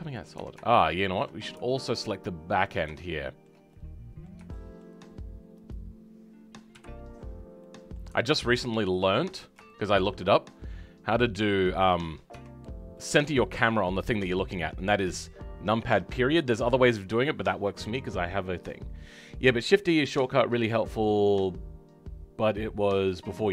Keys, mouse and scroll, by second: 5.7 click, 6.7 KP_Decimal, 7.6-8.9 middle drag, 8.9 alt+click, 9.2-9.6 alt+scroll down 3, 9.6-11.4 shift+middle drag, 11.4 click, 12.3 Tab, 12.9-23.5 middle drag.